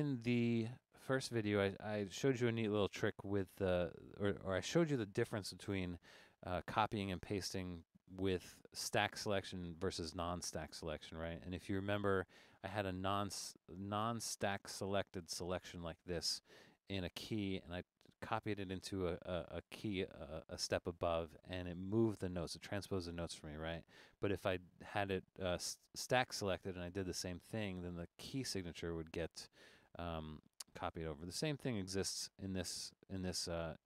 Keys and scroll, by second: 7.6 super+=.